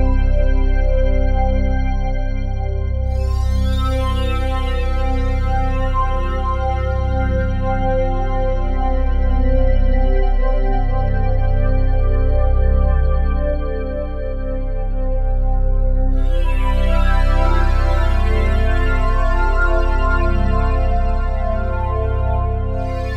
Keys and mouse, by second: 1.0 ctrl+s, 1.9-7.4 drag, 7.6-10.8 drag, 13.1-15.1 drag, 15.8 click, 16.4 click, 17.2 click, 20.4 click, 21.4 ctrl+s, 22.6-23.1 drag.